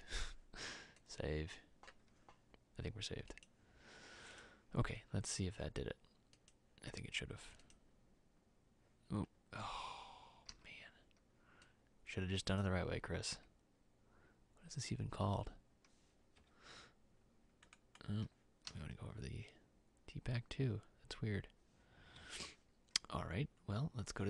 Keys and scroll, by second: 10.7 e, 13.4 e, 16.6 Escape, 22.4 Escape.